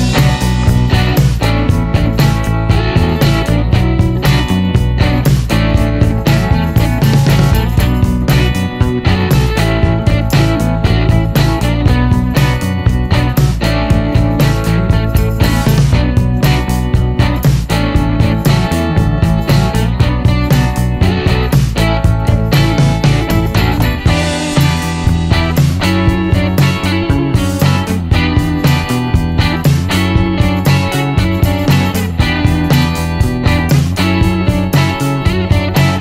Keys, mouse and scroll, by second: 1.2 l, 2.6 click, 3.7 click, 5.1 click, 6.2 v, 7.3 click, 8.7 shift+v, 10.2 1, 10.4 Return, 12.7-14.9 drag, 15.1 middle click, 15.3-15.7 scroll up 1, 15.7-16.2 scroll down 1, 16.2-17.3 middle drag, 19.3-20.4 middle drag, 22.0 click, 24.5 click, 26.7 click, 28.2 click, 28.7 middle click, 29.1 click, 31.8 n, 32.9 middle click, 34.2 click, 35.2 shift+r.